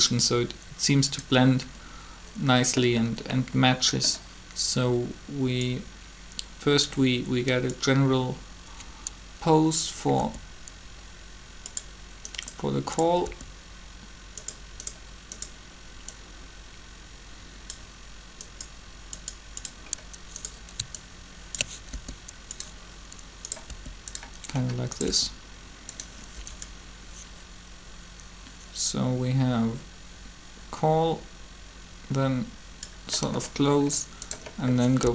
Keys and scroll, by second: 10.2 r, 13.2 r, 21.9 ctrl+r, 23.7 r, 35.0 b.